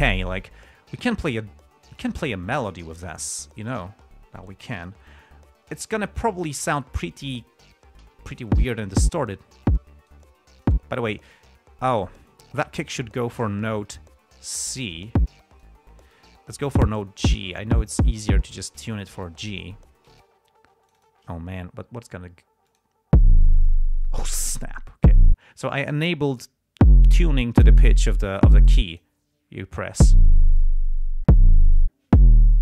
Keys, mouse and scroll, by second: 2.3 click, 4.2 ctrl+scroll up 2, 4.7 ctrl+scroll up 2, 5.1 ctrl+scroll down 2, 5.4 ctrl+scroll up 2, 5.7-6.3 ctrl+scroll down 4, 6.8 ctrl+scroll down 2, 7.3 ctrl+scroll up 2, 7.6 ctrl+scroll down 2, 8.4 ctrl+e, 8.8 click, 9.3 click, 10.0 click, 12.9 click, 15.1 e, 15.2 click, 17.0-20.0 drag, 20.5 click, 21.2 click, 23.0 click, 26.7 click, 29.3 click.